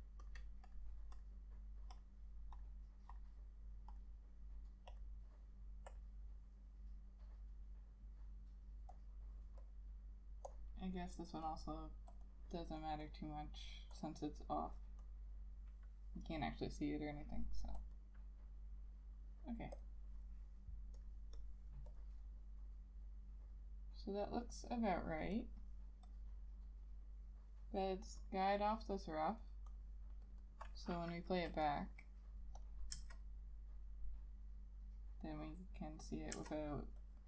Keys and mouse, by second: 12.4 double click, 18.1 double click, 21.5 double click, 28.9 right click, 30.6 double click, 33.1 Return, 36.5 Return.